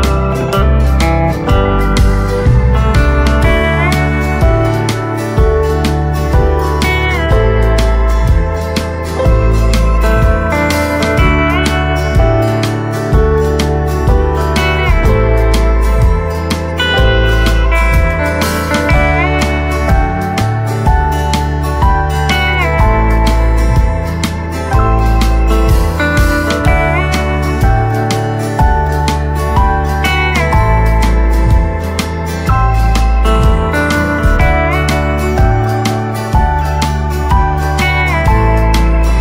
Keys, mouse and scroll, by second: 2.3 shift+click, 2.6 shift+right click, 3.3 scroll up 1, 4.8 click, 5.5 scroll up 1, 7.0 click, 9.1 right click, 10.0 click, 13.2 right click, 13.7 click, 14.1-15.2 scroll up 1, 15.2 click, 15.7 scroll up 1, 16.2 click, 17.1 ctrl+z, 17.8-20.7 drag, 20.7-21.1 scroll up 1, 21.5 click, 22.7-23.3 scroll down 1, 23.9 click, 28.2-29.6 typing, 32.0 shift+click, 32.6 scroll down 1, 34.8-35.3 scroll up 1, 35.3-39.2 drag.